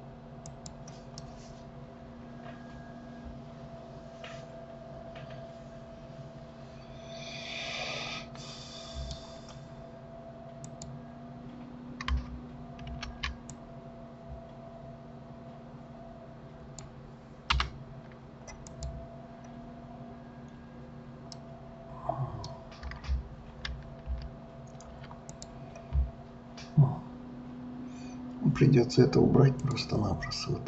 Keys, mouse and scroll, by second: 1.2-4.3 middle drag, 10.7 click, 12.9 ctrl+r, 18.6 click, 21.3-23.7 middle drag, 23.7 ctrl+z, 24.0 ctrl+z, 25.3 click, 29.6 click.